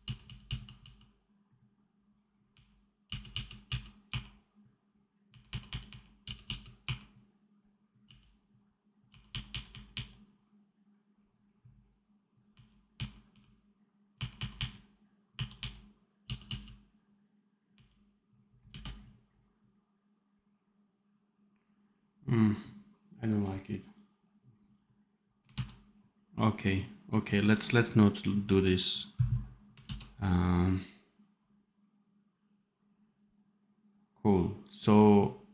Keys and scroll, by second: 0.4 f, 2.4 r, 3.0 f, 4.0 r, 5.2 r, 6.1 f, 6.7 r, 7.9 f, 9.0 r, 9.6 r, 12.4 r, 12.9 r, 14.1 r, 15.5 r, 16.1 f, 17.6 r, 18.6 d, 25.5 ctrl+s, 29.8 ctrl+s.